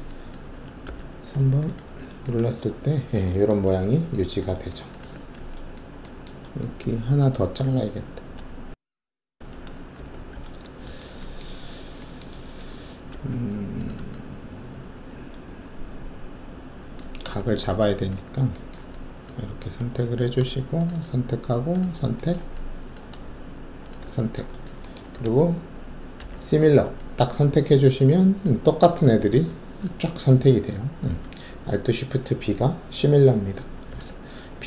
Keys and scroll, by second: 0.8 alt+3, 5.1 alt+1, 9.9 alt+shift+3, 13.1 alt+2, 17.4 alt+shift+q, 26.1 alt+shift+b.